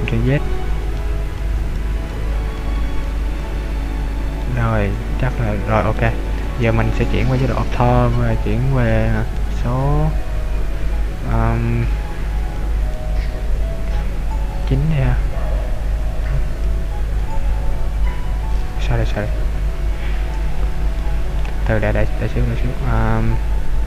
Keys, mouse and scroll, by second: 0.0 ctrl+z, 0.4 ctrl+z, 1.0 ctrl+z, 1.7 ctrl+z, 1.9 ctrl+z, 2.3 ctrl+z, 2.9 ctrl+z, 3.3 ctrl+z, 3.5 ctrl+z, 4.3 middle click, 7.3 KP_5, 9.3 KP_2, 10.8 KP_3, 12.2 KP_5, 12.6 KP_5, 13.0 KP_7, 14.5 KP_9, 16.1 KP_8, 16.7 KP_9, 17.2 KP_0, 19.2 Escape, 21.0 middle click.